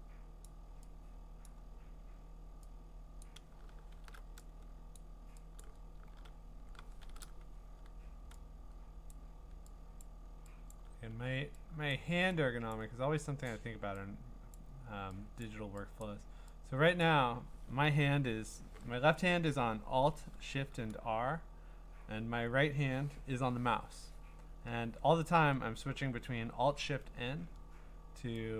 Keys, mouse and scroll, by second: 0.5 click, 1.5 click, 3.2 click, 3.9 alt+shift+t, 5.0 click, 5.6 click, 6.3 alt+shift+r, 7.0 alt+shift+r, 9.1 click, 10.0 click, 10.7 click, 11.9 click, 12.7 click, 13.5 click, 14.5 click, 15.4 click, 16.0 click, 17.0 click.